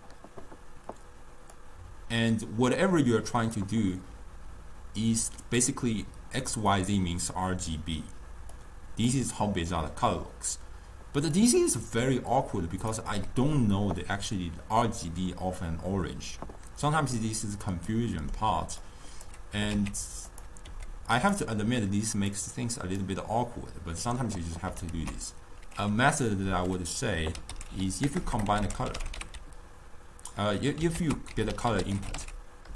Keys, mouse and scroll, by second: 1.6-4.7 drag, 8.6 click, 11.4-14.6 drag, 18.0-18.9 middle drag, 18.9 click, 19.6 g, 20.8 g, 22.4-23.4 drag, 23.4-25.0 middle drag, 25.0 ctrl+a, 28.3 BackSpace, 28.4 BackSpace.